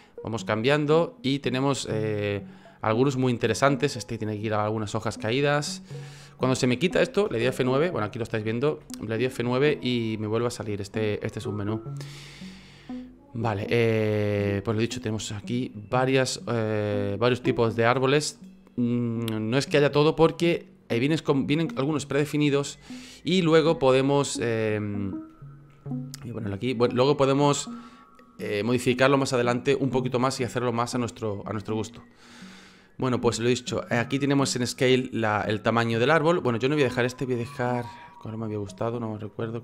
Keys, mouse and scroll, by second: 5.2 F9, 6.9 F9, 8.7 F9, 25.7 F9.